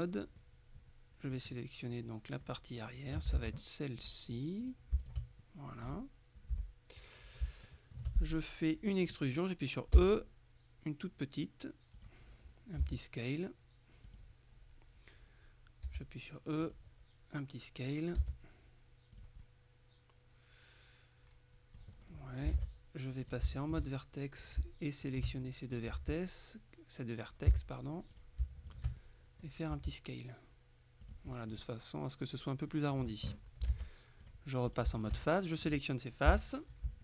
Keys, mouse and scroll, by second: 0.4-1.9 middle drag, 3.4 ctrl+Tab, 4.1 click, 4.7-5.7 middle drag, 6.6 KP_3, 7.7 shift+middle click, 10.0 e, 12.0 click, 12.9 s, 14.1 click, 15.9 e, 16.7 click, 18.3 s, 19.2 click, 22.0-22.5 scroll up 1, 22.6 ctrl+Tab, 22.6 ctrl+scroll up 1, 23.3 shift+click, 23.6 shift+middle click, 24.5 shift+right click, 25.5 shift+middle click, 26.0 shift+s, 27.5 Escape, 28.2 shift+right click, 29.1 shift+middle click, 29.8 s, 31.1-32.1 drag, 32.8 middle click, 33.8 ctrl+Tab, 34.3-35.6 ctrl+drag, 34.8 ctrl+middle click, 34.9 ctrl+shift+right click, 36.4 KP_3.